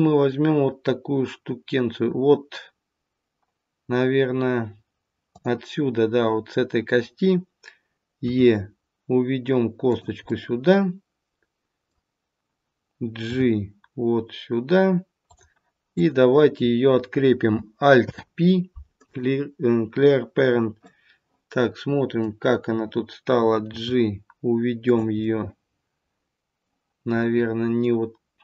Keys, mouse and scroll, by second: 5.2 click, 8.3 e, 10.2 middle click, 13.2 g, 15.9 click, 17.9 alt+p, 20.7 middle click, 23.7 g, 25.1 middle click, 27.1 middle click.